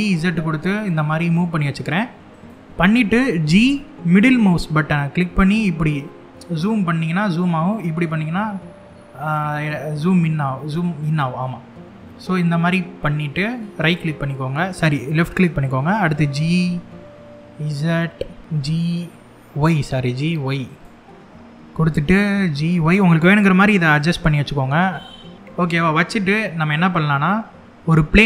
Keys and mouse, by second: 2.0 click, 3.1 g, 3.8-13.1 middle drag, 13.4 click, 15.5 g, 17.1 y, 18.4 g, 18.9 y, 20.3 click, 22.0 g, 22.4 z, 23.6 click, 24.5 g, 25.3 z, 27.5 shift+a.